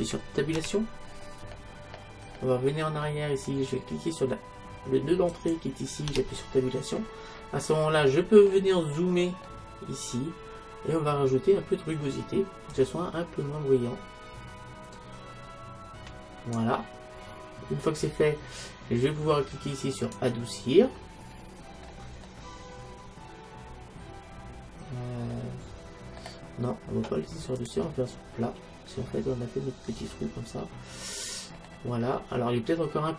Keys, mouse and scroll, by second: 0.6 Tab, 1.6-5.4 middle drag, 5.4 click, 6.2 Tab, 7.4-12.5 middle drag, 12.8-14.6 drag, 17.2-20.0 middle drag, 20.0-22.0 drag, 22.0-24.2 middle drag, 27.7-29.5 drag, 30.8-33.1 middle drag.